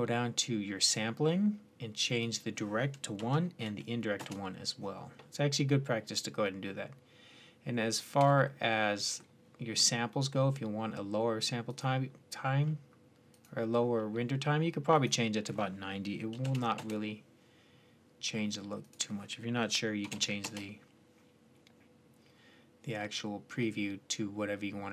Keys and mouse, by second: 0.3 middle click, 0.6-4.8 drag, 14.3-14.8 middle drag, 14.8 click, 20.6-24.9 middle drag.